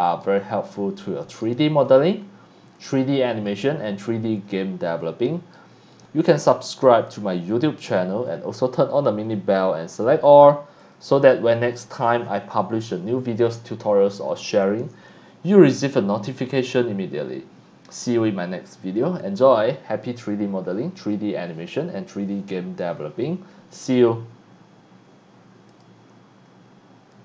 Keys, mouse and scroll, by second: 0.2-1.4 right drag, 1.8 click, 2.8 click, 3.5-5.5 right drag, 7.1 click, 9.9 click, 10.8 click, 25.7 click, 27.1 click.